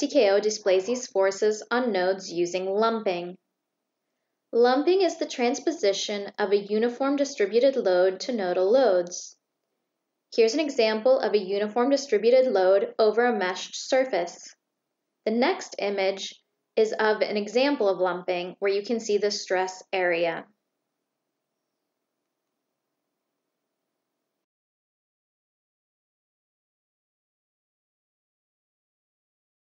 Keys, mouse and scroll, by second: 21.5-29.7 drag.